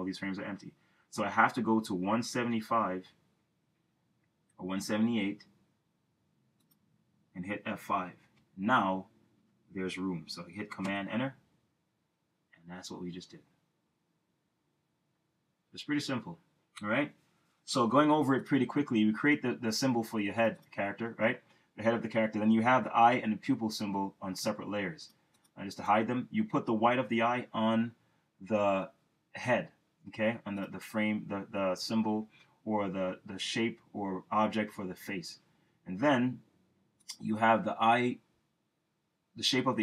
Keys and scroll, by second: 8.5 F5, 11.0 super+Return.